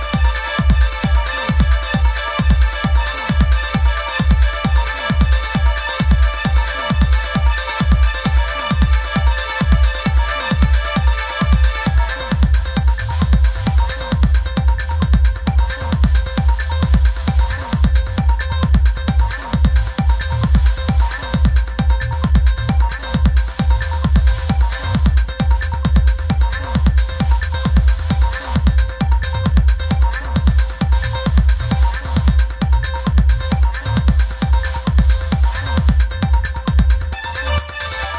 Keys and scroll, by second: 5.0 i, 7.6 super+f, 8.0 super+[, 10.4 super+-, 11.1 super+=, 26.4 super+=, 29.9 Up, 31.1 Down, 34.3 Left, 37.0 super+-, 37.4 i.